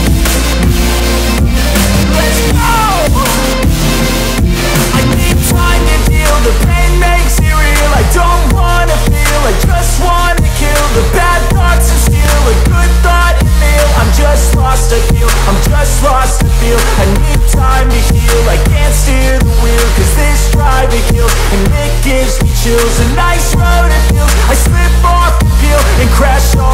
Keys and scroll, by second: 1.3 F3, 2.3 Delete, 3.1 F2, 9.3 Escape, 11.4 F4, 12.6 F2, 13.4 ctrl+r, 15.6 F4, 19.1 ctrl+r, 20.7 ctrl+g, 22.1 F2.